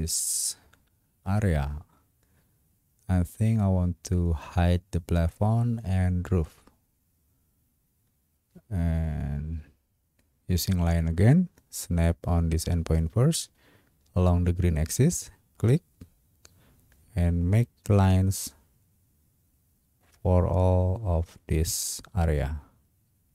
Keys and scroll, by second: 23.2 Escape.